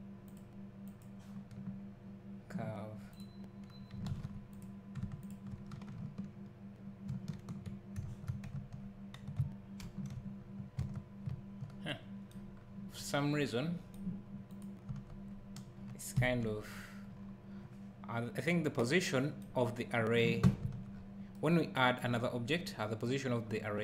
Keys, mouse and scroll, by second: 4.1 ctrl+a, 5.2 shift+click, 7.1 ctrl+j, 8.6 Tab, 9.8 alt+h, 10.8 Tab, 11.3 `, 12.5-12.8 scroll down 1, 14.5 click, 14.9 Tab, 16.1 KP_Decimal, 17.1 scroll up 1, 20.6 Tab, 20.9 scroll up 1, 22.0 scroll down 1, 23.4 scroll up 1.